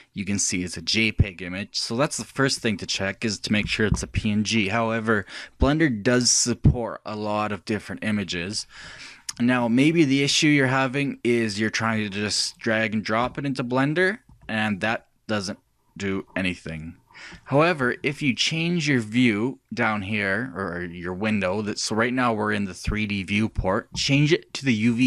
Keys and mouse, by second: 14.3-17.9 drag, 23.6-25.0 drag.